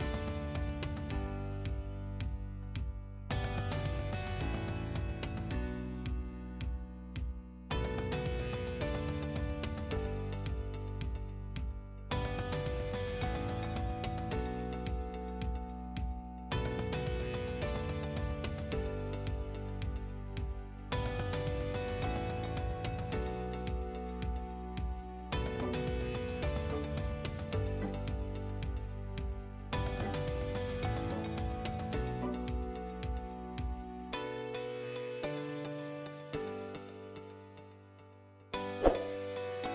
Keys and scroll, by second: 1.1 Escape, 4.3 Escape, 8.8 s, 9.3 p, 9.5 l, 10.4 Escape, 11.3 s, 11.8 p, 12.1 l, 13.0 space, 16.8 space, 18.5-20.1 typing, 23.1 8, 23.3 0, 25.2-26.2 typing, 30.0 6, 39.3 Return.